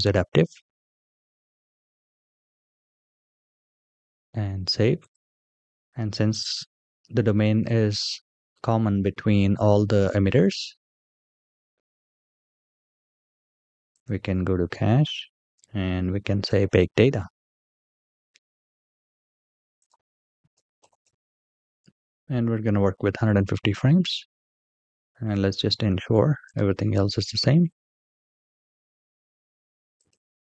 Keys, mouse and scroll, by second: 2.0 click, 3.5-5.5 drag, 5.7-8.0 scroll up 4, 11.2-11.9 scroll down 3, 11.9-14.0 scroll down 3, 14.0-14.5 drag, 15.3 scroll down 1, 19.5-21.8 drag, 26.5-27.0 drag, 30.0 click.